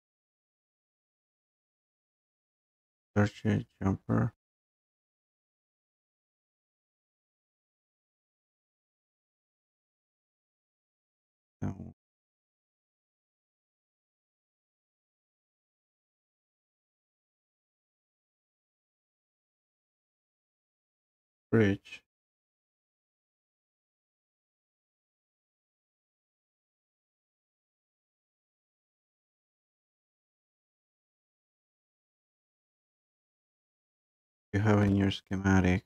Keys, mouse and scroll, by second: 6.5-10.5 scroll up 1, 10.6-11.3 scroll, 26.4 click.